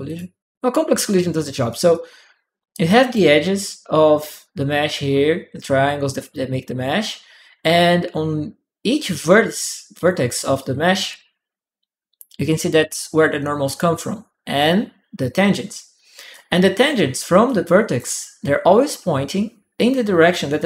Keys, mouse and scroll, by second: 1.5 click, 1.7 right click, 2.0 click, 2.0 right click, 9.4-10.9 drag, 9.4-10.9 right drag, 16.1 click, 16.1 right click, 17.2 middle click.